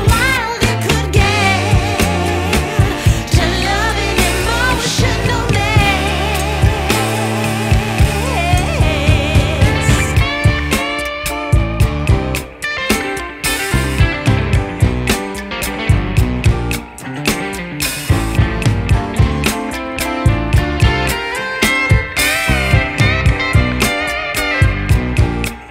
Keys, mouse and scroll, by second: 1.1-1.7 scroll down 6, 1.7-2.2 drag, 2.2-2.5 scroll down 5, 3.1-7.4 drag, 8.1 click, 11.1-12.2 scroll down 1, 12.2-13.2 middle drag, 13.2 ctrl+s, 13.6-15.3 middle drag, 15.3-18.3 drag, 20.2 ctrl+s, 21.1-25.1 drag, 25.1 ctrl+z.